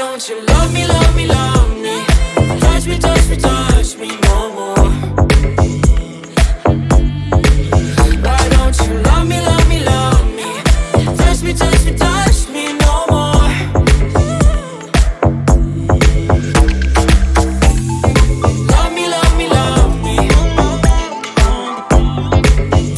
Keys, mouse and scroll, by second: 0.9-2.6 middle drag, 2.6 click, 3.2 ctrl+a, 4.7-6.9 drag, 7.9 click, 9.3 click, 9.6 click, 10.3-12.7 middle drag, 12.7-14.2 drag, 15.1-16.5 drag, 16.5-21.1 middle drag, 21.1 click.